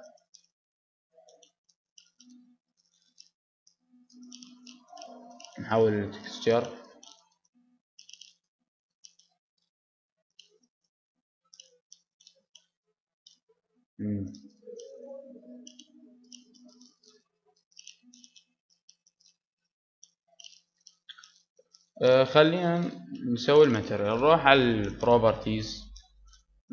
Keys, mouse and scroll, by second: 1.6-3.0 drag, 1.6 g, 4.5 Tab, 4.5-6.3 drag, 6.9 click, 7.4-8.6 middle drag, 8.8 middle click, 9.4 Tab, 10.7 Tab, 11.3 middle click, 11.7-14.1 middle drag, 14.4-15.5 middle drag, 14.7 Tab, 15.2 Tab, 15.5-17.1 drag, 16.1 Tab, 17.1 g, 19.1 Tab, 19.1 click, 19.9 middle click, 20.7-26.7 middle drag.